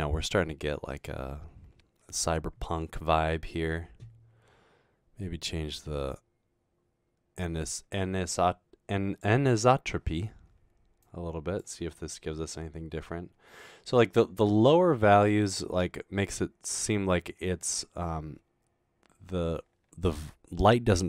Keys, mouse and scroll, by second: 6.1-9.2 drag, 11.0 click.